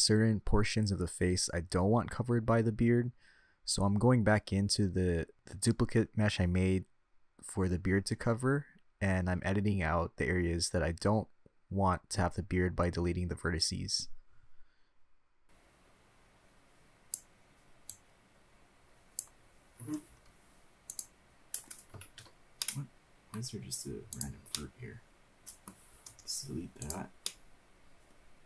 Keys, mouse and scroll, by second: 2.6 shift+h, 3.2-4.4 middle drag, 5.5-6.3 drag, 7.7-9.5 drag, 10.2 click, 11.2 middle click, 12.1-13.8 drag, 14.9 KP_3, 16.0-17.9 drag, 18.7 click, 19.3-21.0 drag, 21.0 Delete, 23.1 ctrl+z, 23.4 middle click, 24.9 click, 25.3-26.5 middle drag, 26.9 Delete, 28.0-28.4 middle drag.